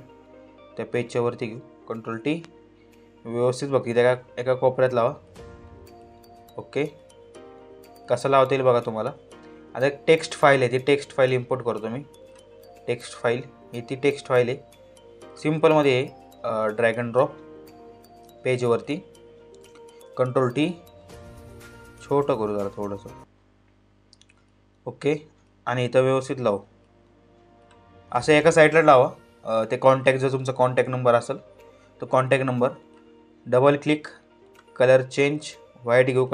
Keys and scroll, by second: 1.6 ctrl+t, 19.7 ctrl+t, 30.5 ctrl+g.